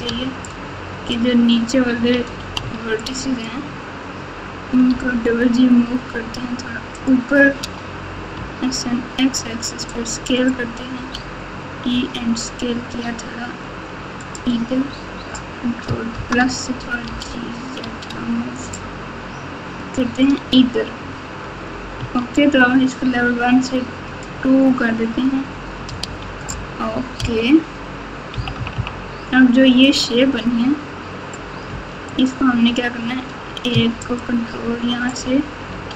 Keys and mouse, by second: 0.0 alt+z, 0.4 click, 0.7 click, 2.6 1, 3.1 click, 4.8 g, 7.6 s, 10.9 e, 16.1 ctrl+KP_Add, 17.0 g, 21.9 Tab, 24.1 click, 24.9 Tab, 26.0 alt+z, 27.1 KP_8, 28.3 KP_2, 28.5 KP_2, 28.7 KP_2, 32.0 click, 34.0 ctrl+click, 35.7 s.